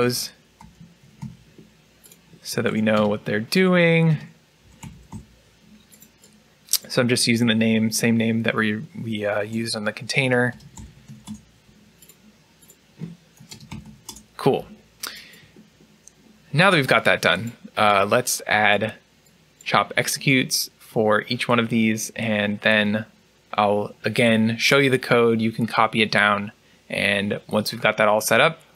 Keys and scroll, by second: 2.6 typing, 5.9-6.7 typing, 9.3 BackSpace, 10.9-11.6 typing, 13.2 BackSpace, 15.4-16.1 typing.